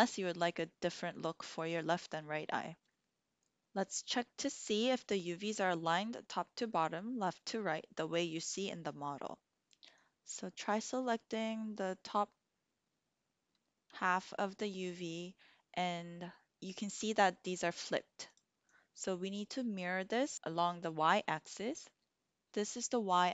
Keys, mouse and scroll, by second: 10.1-12.0 drag, 18.2 click, 18.6-19.8 drag.